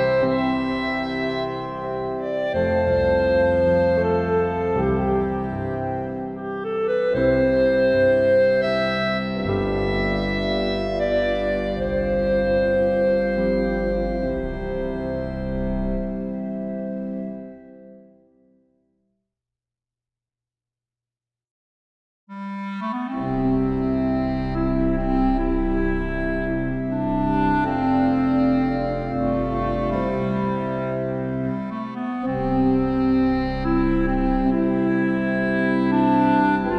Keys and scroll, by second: 14.8 ctrl+t.